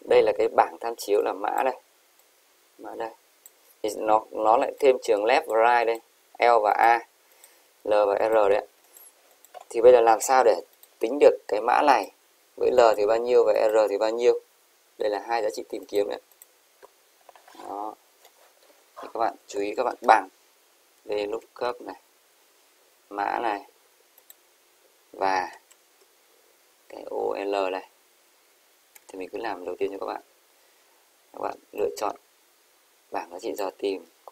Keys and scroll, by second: 25.8 shift+7.